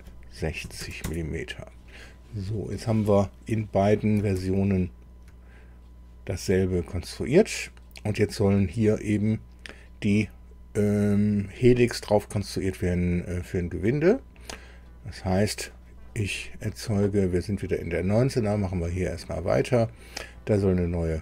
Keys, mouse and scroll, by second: 0.6 KP_6, 1.0 KP_0, 1.0 KP_Enter, 4.4 alt+Tab.